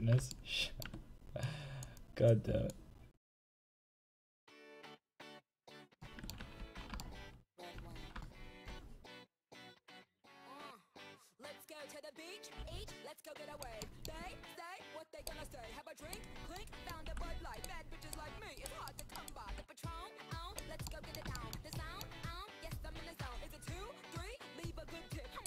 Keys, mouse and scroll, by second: 1.5-5.6 drag, 6.6 ctrl+z, 9.6-12.9 drag, 12.5 r, 14.5 r, 16.4-17.5 right drag, 17.1 r, 19.5 r, 22.6-25.4 right drag.